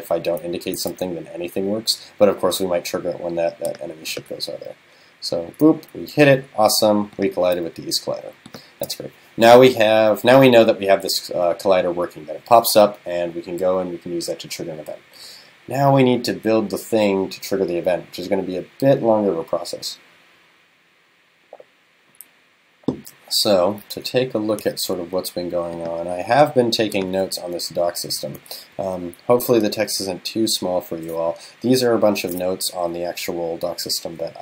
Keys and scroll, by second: 27.9 super+-.